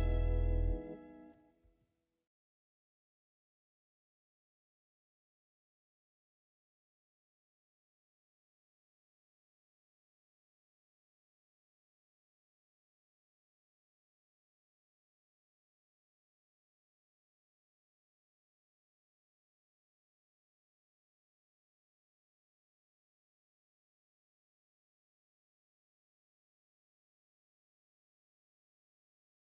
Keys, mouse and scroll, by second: 0.1 click, 1.3-1.8 scroll down 1, 2.0 space, 9.0 click, 11.0 Delete, 11.7 click, 14.1 ctrl+click, 15.3 scroll down 1, 16.0-16.5 scroll up 1, 16.5-17.5 scroll down 1, 17.8 click, 22.8 right click, 23.3 click, 23.5-25.3 scroll up 1, 26.1 click, 28.1 ctrl+click, 28.4 ctrl+space.